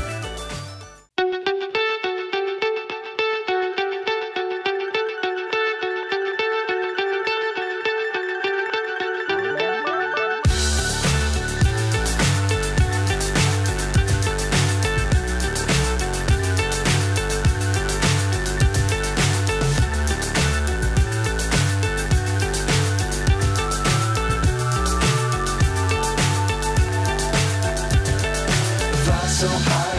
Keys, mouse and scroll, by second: 1.9 click, 4.2-6.1 drag, 6.5-8.6 drag, 7.6 KP_0, 9.0 click, 10.8 shift+d, 13.1-14.2 drag, 14.8 g, 16.8-18.4 drag, 18.7 click, 20.6 click, 21.8 shift+a, 25.8 click, 27.3 click, 28.9-29.9 drag.